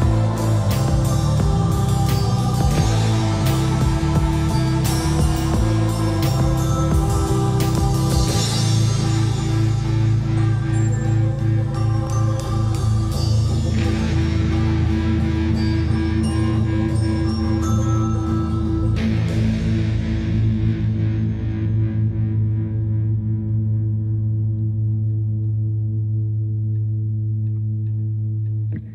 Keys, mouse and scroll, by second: 0.3 typing, 1.3 scroll up 1, 1.6-3.9 shift+middle drag, 3.9-4.6 scroll up 1, 4.6-5.0 scroll down 1, 5.0 scroll up 1, 5.6-6.9 typing, 9.6 typing, 10.3 scroll up 1, 13.0-14.0 typing, 16.6-17.6 typing, 19.7 click, 20.1 scroll down 1, 21.5-22.3 scroll up 1, 22.3 click, 22.7 scroll down 1, 24.0 shift+middle click, 24.6-25.2 scroll up 1, 25.9 scroll down 1, 26.3-28.7 typing, 27.1 Escape.